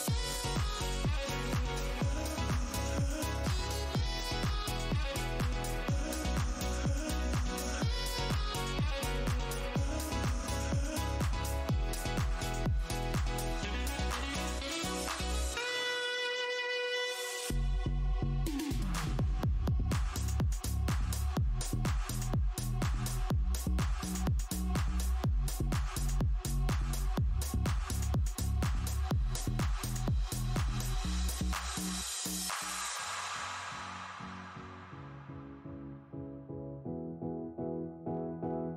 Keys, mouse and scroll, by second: 0.1 click, 0.9 Tab, 1.4 click, 2.9 Tab, 3.0 w, 3.6 Tab, 3.9 click, 4.5 shift+Tab, 5.9 click, 6.1 Tab, 6.4 ctrl+click, 6.7 ctrl+Tab, 7.4 ctrl+click, 9.3 click, 10.7 right click, 11.1 click, 11.4 space, 12.0 click, 12.1 Tab, 12.4 click, 12.4 Tab, 13.1 space, 13.9 alt+click, 14.1-14.9 alt+scroll down 1, 16.7 click, 16.7 Tab, 17.4 click, 18.1 alt+click, 18.6 Tab, 18.9 click, 20.2 click, 21.1 click, 22.0 alt+click, 22.2 scroll down 1, 23.2 Tab, 23.4 click, 23.5 click, 23.6 scroll down 1, 24.6 space, 25.1 click, 25.4 Tab, 25.7 alt+click, 26.2 Tab, 26.5 click, 26.7 alt+Tab, 27.3 alt+h, 27.9 click, 28.4 Tab, 28.8 click, 28.9 w, 29.4 `, 29.8 v, 30.4 ctrl+shift+Tab, 31.0 alt+click, 31.1 alt+Tab, 31.2-31.7 alt+scroll down 1, 31.9 Tab, 32.4 scroll down 1, 33.0-33.4 scroll down 1, 33.4 alt+click, 34.0 alt+Tab, 34.0 alt+click, 34.2 alt+Tab, 36.7 Tab, 37.8 alt+scroll down 1.